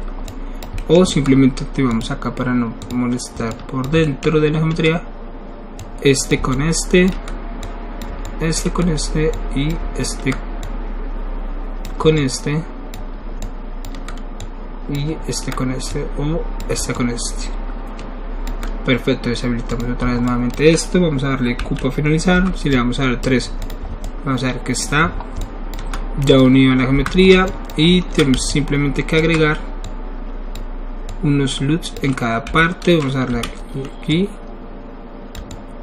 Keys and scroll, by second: 22.3 3, 26.9 1, 28.3 alt+shift+1, 32.5 e.